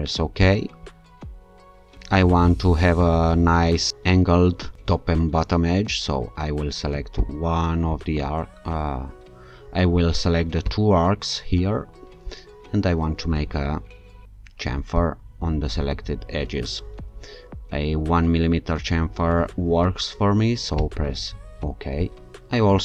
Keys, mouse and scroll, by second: 0.4 click, 7.2 alt+shift+click, 10.7 ctrl+click, 15.0 click, 20.8 click.